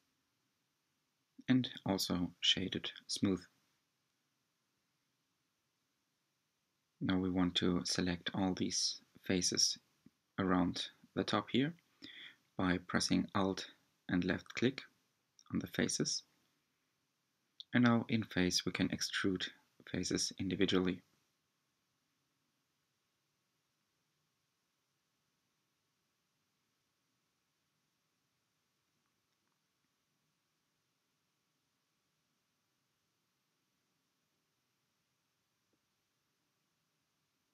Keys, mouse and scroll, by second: 0.7 Tab, 1.6 click, 2.5-5.5 middle drag, 5.5 shift+click, 8.0 alt+click, 8.6-9.9 middle drag, 9.9-10.6 scroll down 2, 11.6-12.8 scroll down 1, 12.8-15.9 drag, 16.4-19.5 drag, 24.7-26.6 shift+middle drag, 26.6 g, 31.6-34.5 middle drag, 34.5 e, 36.7 s.